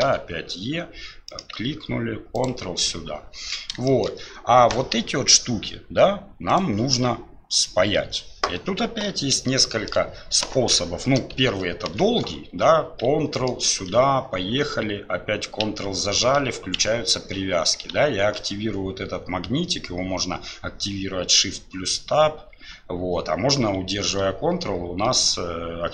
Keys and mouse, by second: 4.0 shift+middle click, 6.5-9.5 drag, 9.7 shift+click.